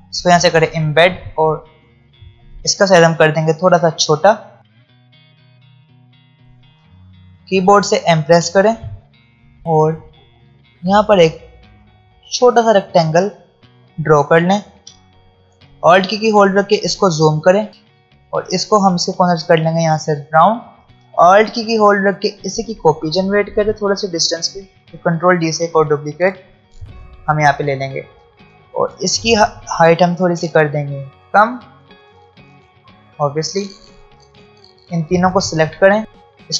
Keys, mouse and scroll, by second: 2.5 alt+scroll up 1, 4.2 alt+shift+click, 4.8 alt+scroll up 1, 5.0 alt+shift+click, 5.1 alt+scroll down 1, 5.3 alt+scroll up 1, 5.4 space, 5.5 click, 5.8 alt+scroll up 3, 5.9 ctrl+z, 6.1 alt+shift+drag, 6.2 alt+scroll down 2, 6.3 drag, 6.9-7.8 alt+scroll up 2, 7.8-8.8 alt+scroll up 1, 8.8 alt+scroll up 1, 8.9 m, 9.6 space, 10.9 click, 13.6-14.6 alt+scroll up 3, 14.9 space, 15.2 click, 15.9-16.4 alt+scroll up 1, 17.7 a, 19.1-20.4 drag, 20.4 v, 20.8 ctrl+z, 21.7-24.7 alt+drag, 25.2 ctrl+d, 26.5-33.2 drag, 29.2-33.2 drag, 33.7-34.4 alt+scroll down 2, 34.4 click, 36.0 space.